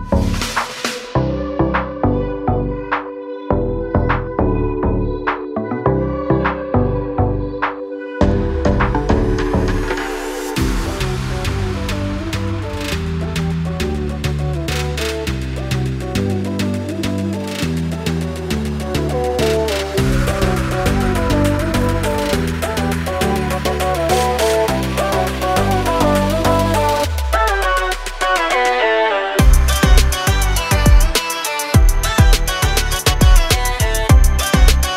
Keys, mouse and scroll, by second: 3.3 click, 5.3 click, 14.7 click, 15.8 ctrl+o, 17.9 click, 19.4 click, 19.6 double click, 20.6 click, 20.7 double click, 21.2 click, 21.4 double click, 24.1 click, 25.4 click, 28.2 click, 31.0 click, 32.3-33.2 scroll up 1, 34.5 click.